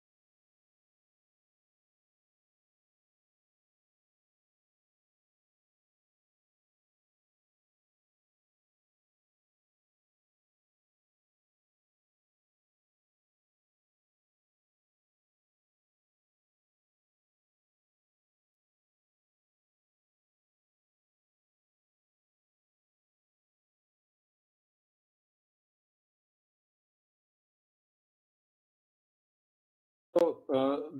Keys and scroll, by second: 0.2-0.9 typing, 5.7-6.4 typing.